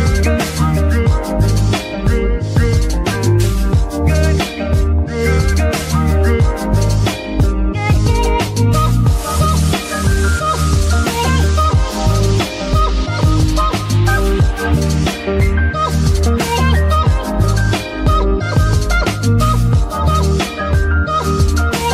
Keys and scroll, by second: 0.0 s, 2.3 g, 2.5 y, 11.5 KP_3.